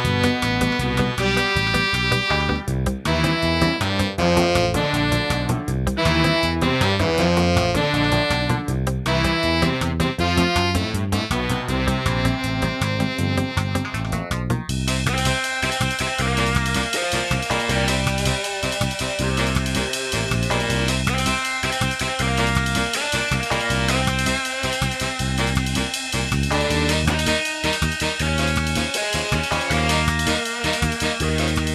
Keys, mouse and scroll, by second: 0.3 scroll up 1, 6.3 click, 7.8 0, 17.0 g, 24.4 click, 25.6 0.